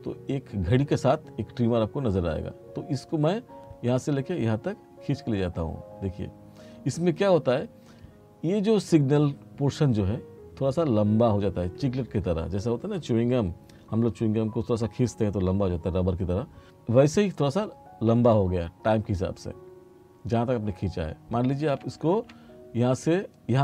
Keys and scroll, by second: 22.2 ctrl+z.